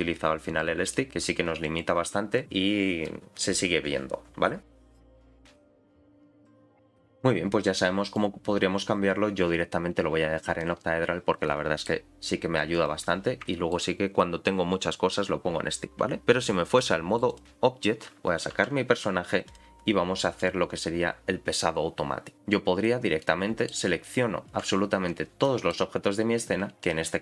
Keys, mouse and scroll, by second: 0.5 click, 0.9 middle click, 1.1 r, 8.1-10.7 drag, 11.1-11.9 scroll down 3, 11.4 middle click, 12.7 click, 13.5 shift+middle click, 16.7 click, 18.5 alt+h, 19.4 click, 20.4 click, 22.3 scroll up 4, 22.6-23.1 scroll down 4, 23.2 middle click, 25.4 middle click, 26.6 scroll up 2, 26.8 click.